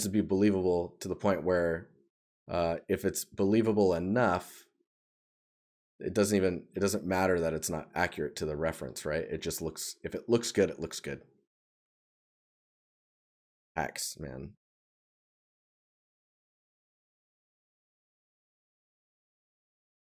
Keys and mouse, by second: 0.6 right click, 12.0 right click.